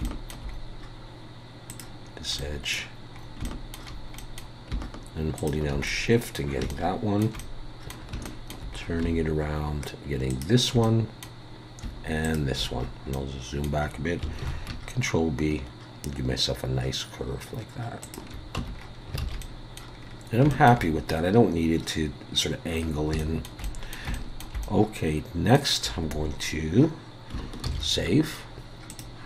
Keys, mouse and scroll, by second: 0.0 shift+middle click, 0.5 scroll up 2, 1.7 click, 2.0-2.5 scroll down 2, 2.4 middle click, 3.2 scroll up 2, 3.4 shift+middle click, 4.2 middle click, 5.4 shift+click, 5.9 middle click, 6.7 shift+middle click, 7.4 middle click, 8.3 shift+middle click, 8.8 scroll up 2, 10.3 shift+click, 10.8 middle click, 12.2 shift+click, 12.6-13.1 scroll down 4, 13.1 middle click, 14.4 ctrl+b, 18.6 Tab, 18.7 scroll down 4, 19.2 alt+a, 19.4 middle click, 20.0 scroll down 3, 20.5 shift+middle click, 22.9 scroll up 3, 23.2 shift+middle click, 23.6 middle click, 24.1 shift+middle click, 24.6 middle click, 28.3 ctrl+s, 28.9 click.